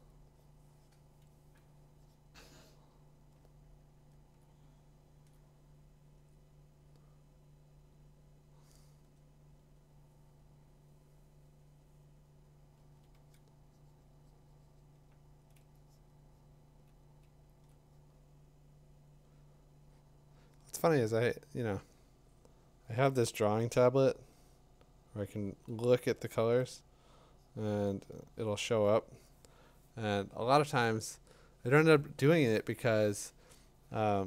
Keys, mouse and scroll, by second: 3.2 click, 4.3 click, 5.3 click, 12.8 [, 13.1 [, 15.6 click, 26.5-33.6 drag.